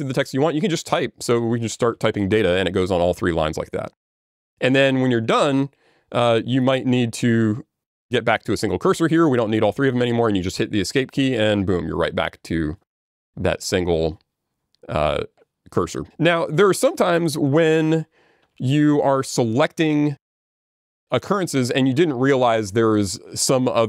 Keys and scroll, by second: 11.0 Escape, 18.1 ctrl+z.